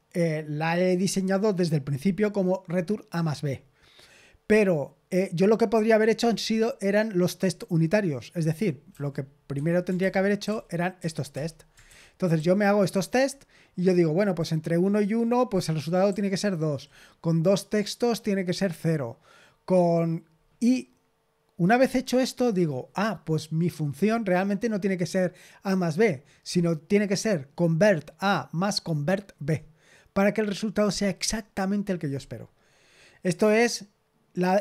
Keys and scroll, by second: 9.5 Escape, 9.9 ctrl+n, 10.1-13.0 typing, 11.8 ctrl+n, 16.0-16.8 typing.